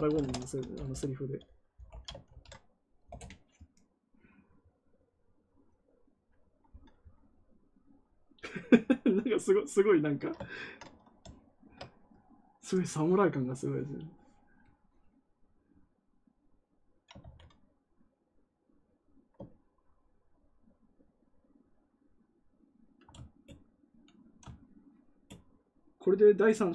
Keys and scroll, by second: 0.7 BackSpace, 1.8 shift+., 2.2 ctrl+v, 3.0 Return, 17.1 ctrl+z.